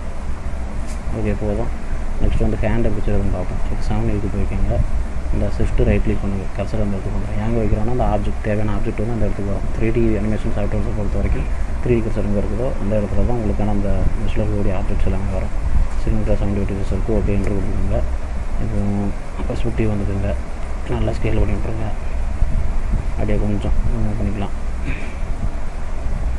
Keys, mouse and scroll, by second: 0.3 middle click, 0.9-1.3 scroll up 3, 1.3 middle click, 3.0 middle click, 3.7 KP_7, 6.4 shift+right click, 8.9 shift+a, 17.4 Return, 19.2 middle click, 20.1-20.4 scroll down 2, 20.4 middle click, 21.2 s, 24.2 click, 25.4 click.